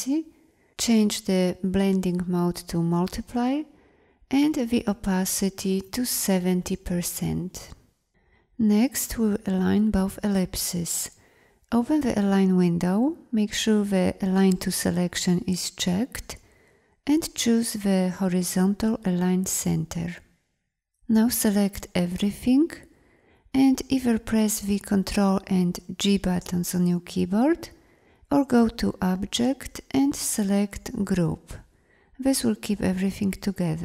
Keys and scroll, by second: 24.3 ctrl+g.